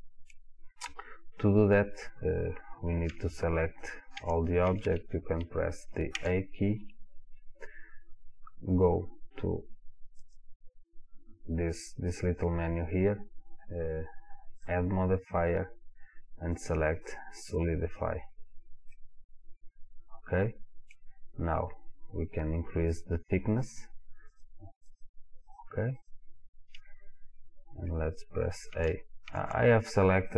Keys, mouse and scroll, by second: 0.0-10.2 middle drag, 3.1 a, 10.2-14.4 drag, 14.7-19.0 drag, 19.0-24.3 middle drag, 24.3 click, 28.3-30.3 middle drag, 28.8 a.